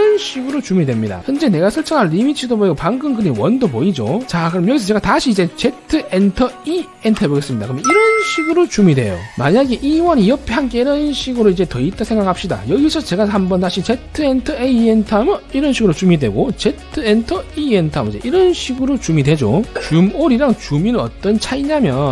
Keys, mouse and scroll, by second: 5.9 z, 6.9 e, 9.7 scroll down 1, 10.0 c, 10.2 c, 10.3 right click, 10.5 click, 10.8 click, 11.2 scroll down 1, 11.6 scroll up 1, 12.0 middle click, 12.2 right click, 12.7 click, 13.6 click, 14.2 z, 14.4 right click, 14.8 a, 15.3 right click, 16.9 z, 17.2 right click, 17.7 e, 18.1 right click, 21.4 scroll down 3, 21.8 middle click.